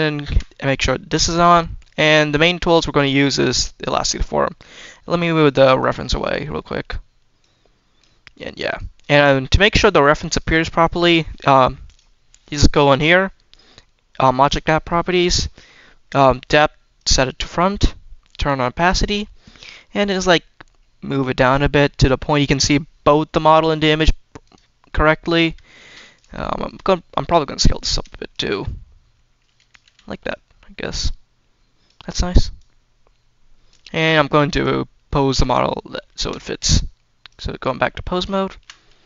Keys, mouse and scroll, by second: 0.0 shift+middle click, 1.7 middle click, 2.3 middle click, 2.6-3.1 scroll down 2, 2.9 middle click, 4.2 middle click, 5.3-5.8 drag, 6.0 click, 6.3-6.6 scroll down 2, 6.4 middle click, 7.3-7.9 drag, 8.5 click, 10.2 click, 11.7 click, 16.8 click, 18.1 click, 19.3-22.2 drag, 22.4 scroll up 2, 24.3 click, 25.1 click, 25.5 shift+middle drag, 26.0 click, 26.4 shift+middle drag, 26.7-27.2 scroll down 2, 27.2 shift+middle drag, 27.5 drag, 27.8 s, 28.2 click, 28.3-29.6 drag, 29.7 g, 30.1-31.7 drag, 32.4-33.5 drag, 34.4 click, 35.0 Tab, 36.0 Tab, 37.1-38.1 drag, 38.3 shift+middle drag, 38.5-39.0 scroll up 2.